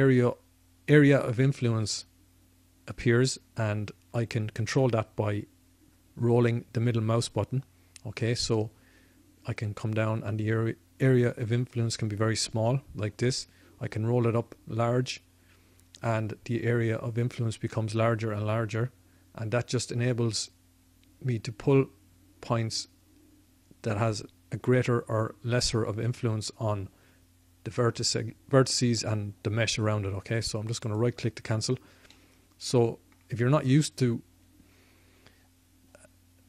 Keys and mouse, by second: 30.9-32.1 right drag, 32.1-36.4 middle drag.